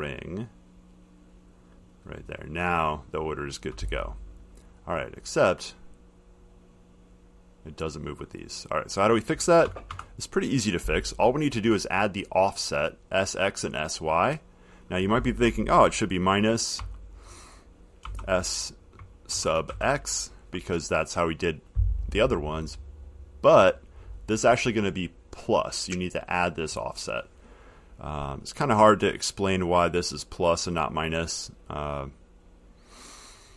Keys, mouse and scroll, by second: 1.6 click, 5.2 middle click, 5.2 middle click, 5.3 middle click, 8.2 click, 8.8 click, 9.9 BackSpace, 10.2 BackSpace, 11.5 click, 14.8 click, 17.0 -, 18.3 s, 19.3-20.4 typing, 31.3 click.